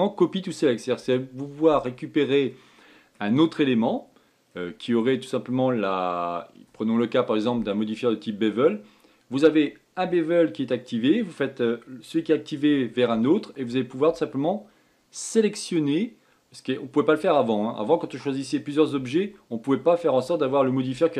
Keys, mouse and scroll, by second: 3.2-4.4 middle drag, 4.4-4.7 scroll down 3, 5.0-8.0 scroll up 2.